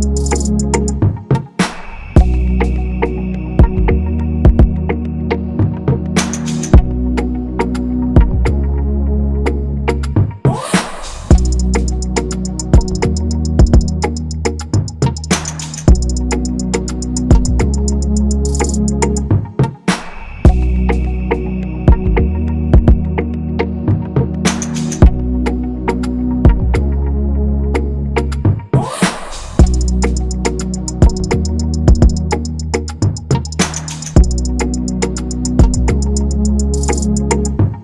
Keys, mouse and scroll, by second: 0.8-1.2 scroll down 1, 1.4-1.8 scroll up 1, 3.5 right click, 11.4 double click, 17.3 Return, 17.8 ctrl+=, 17.9 ctrl+=, 18.0 ctrl+=, 25.0 ctrl+z, 28.1 ctrl+z, 30.7-31.7 scroll.